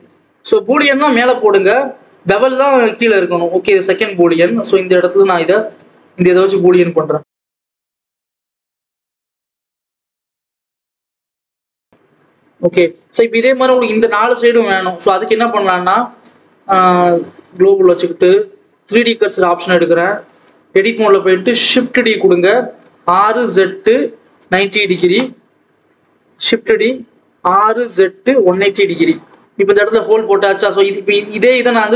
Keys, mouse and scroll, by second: 0.0-3.5 drag, 3.9-5.0 scroll down 2, 5.0 click, 6.1 click, 6.3-6.7 scroll up 1, 6.7 Tab, 7.1 s, 9.1 KP_1, 9.6-10.2 scroll up 3, 10.2 Tab, 10.4 g, 11.1 scroll down 2, 11.4 click, 11.8-12.2 scroll down 1, 12.2 ctrl+s, 12.4 scroll up 1, 12.6-14.5 scroll down 3, 14.5 KP_7, 17.4-20.4 drag, 20.4 Tab, 21.4 shift+d, 22.8 r, 25.1 scroll down 1, 25.3 a, 25.8 shift+d, 27.2 r, 29.1 alt+a, 29.4 Tab, 29.7-30.6 scroll up 1, 30.6 scroll up 1, 30.9-31.6 scroll down 1.